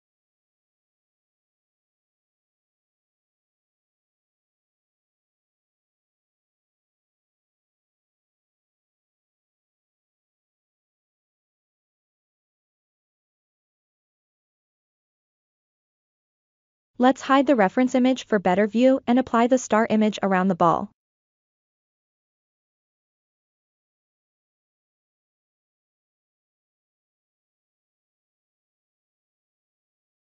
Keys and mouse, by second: 2.5 click, 4.1 click, 7.2-9.2 right drag, 9.5-10.9 right drag, 12.0 f, 13.6-14.9 drag, 15.6 ctrl+KP_3, 18.5 click, 20.5-22.9 right drag, 23.2-24.5 drag, 25.5 KP_1, 28.1 shift+click, 28.6 shift+right click.